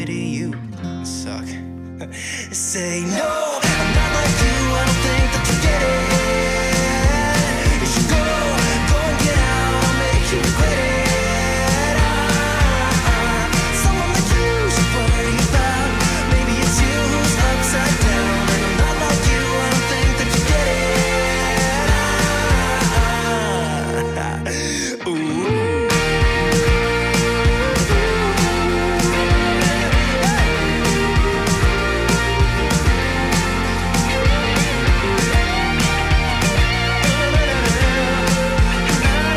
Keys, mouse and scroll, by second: 0.7 scroll up 1, 2.3-14.0 drag, 14.0 middle click, 15.2 scroll down 1, 18.5-19.2 scroll down 1, 19.2-22.8 alt+drag, 25.6 alt+click, 26.7 scroll up 1, 28.7-30.5 drag, 30.8 scroll up 1, 32.3-33.7 drag.